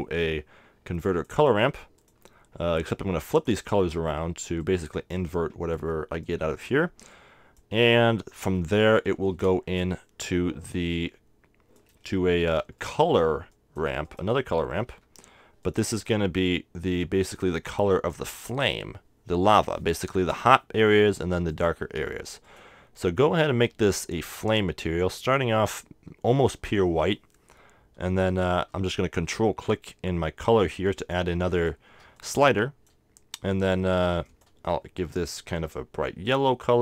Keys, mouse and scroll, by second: 2.1-8.9 drag, 7.8-10.5 middle drag, 9.6 shift+a, 11.0-12.6 drag, 12.8 middle click, 13.8 click, 14.9 shift+d, 17.2 click, 17.4-21.0 middle drag, 21.5-24.4 drag, 31.6-33.9 drag, 34.2-35.9 drag.